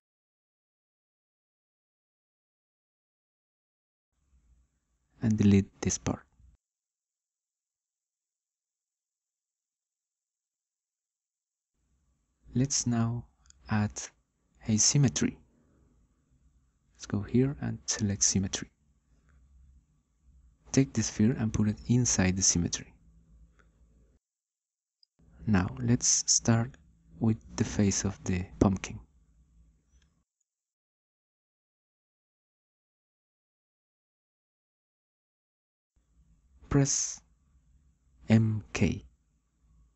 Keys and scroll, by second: 7.9 Delete, 38.8 m, 39.4 k.